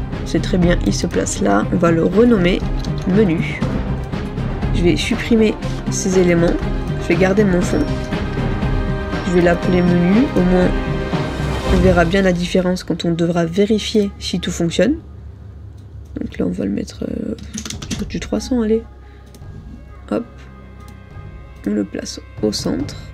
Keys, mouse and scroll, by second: 1.1 double click, 2.7-3.6 typing, 11.3-12.6 typing, 17.4-18.5 typing.